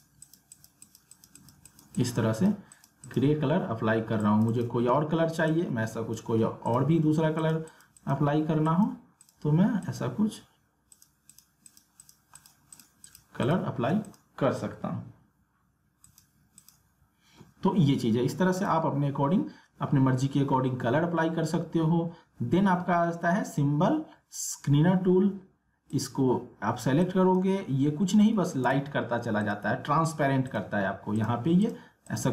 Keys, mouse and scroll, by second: 25.9-28.6 drag, 28.6 ctrl+z, 29.4 click.